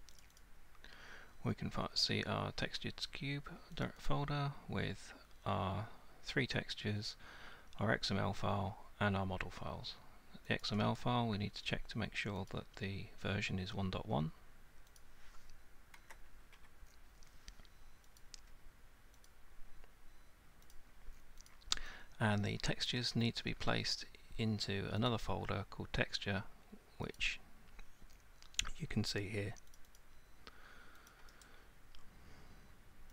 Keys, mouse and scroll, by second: 0.2 click, 0.4 click, 3.8 click, 4.1 click, 10.6 click, 11.0 right click, 12.5 right click, 15.0 right click, 16.0 Delete, 18.2 click, 19.3 click, 20.7 click, 21.5 click, 22.9 click, 25.1 click, 27.2 click, 29.8 click, 30.0 click, 31.1 click, 31.4 right click.